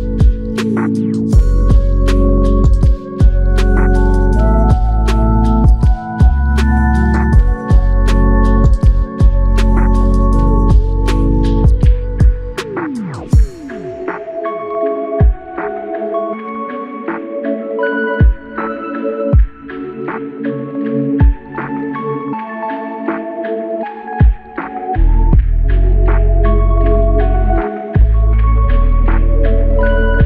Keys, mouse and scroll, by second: 6.8 ctrl+click, 8.1 ctrl+click, 11.4 ctrl+click, 14.9 alt+click, 24.4 ctrl+click.